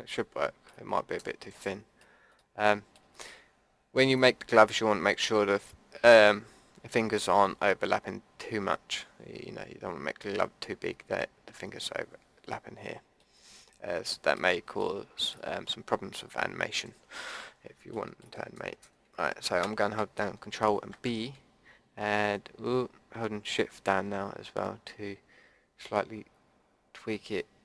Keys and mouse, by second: 17.0 middle click, 20.9 ctrl+b.